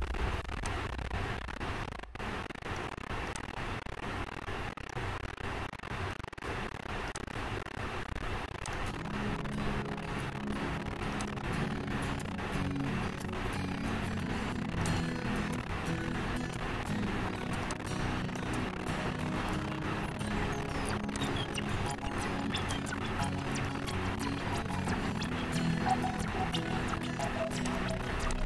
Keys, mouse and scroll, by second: 3.0 click, 5.0 click, 7.6 click, 9.0 click, 11.5 click, 15.2 click, 18.6 click, 21.5 click, 23.9 click, 28.0 click.